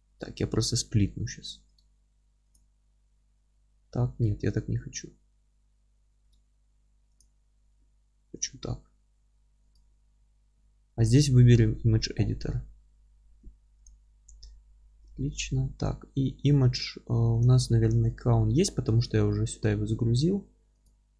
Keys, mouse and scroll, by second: 18.5-21.1 middle drag.